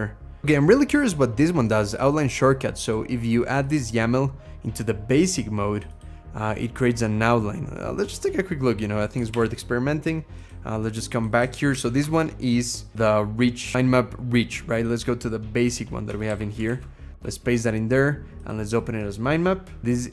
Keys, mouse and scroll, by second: 11.5 ctrl+shift+h, 15.9 Escape, 16.5 ctrl+v, 17.0 Escape.